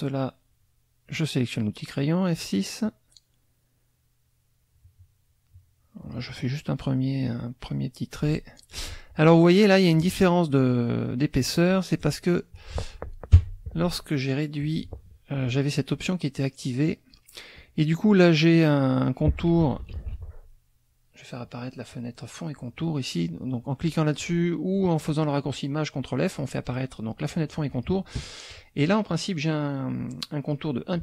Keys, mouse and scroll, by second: 2.8-6.3 drag, 7.7 click, 13.3 F6, 14.6 click, 19.9 ctrl+shift+f, 21.9 click, 23.8 click, 27.7 click, 28.5-30.7 drag.